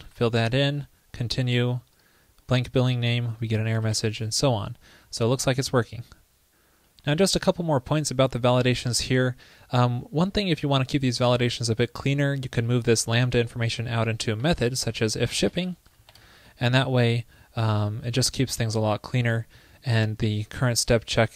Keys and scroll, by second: 14.4 super+x, 20.3 super+v.